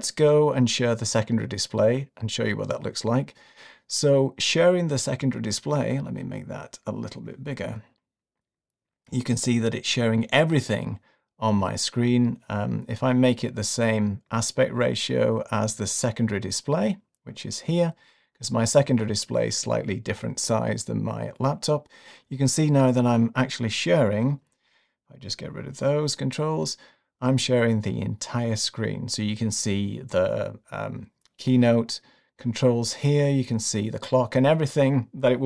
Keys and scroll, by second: 25.5 super+`.